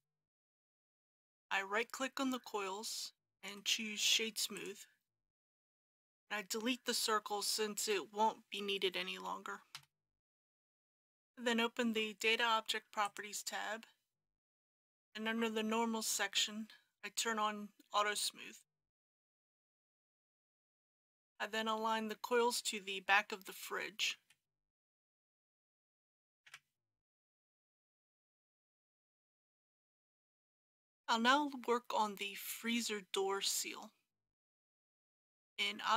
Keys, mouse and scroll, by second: 3.3 right click, 4.5 click, 9.8 Delete, 10.5 click, 24.2 KP_3, 26.1 g, 26.4 y, 30.0 click, 30.0 KP_3.